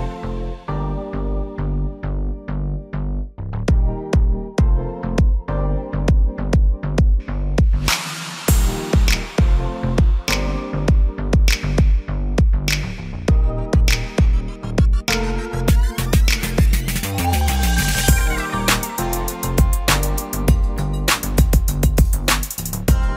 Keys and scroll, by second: 10.1 ctrl+j.